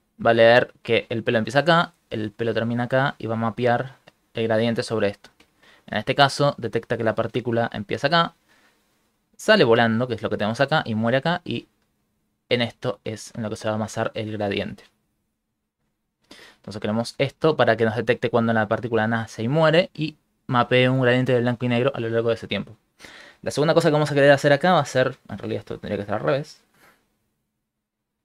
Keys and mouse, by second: 1.0 click, 2.2 click, 3.3 click, 3.5 click, 3.7-4.2 click, 3.8 click, 3.9 click, 4.1 click, 4.3 click, 7.3 click, 9.1 click, 9.3 click, 10.8 click, 11.9 click, 12.1 click, 12.3-12.9 click, 12.5 click, 12.5 click, 12.7 click, 13.7-14.1 ctrl+click, 22.0 middle click, 25.9 click, 27.4 click.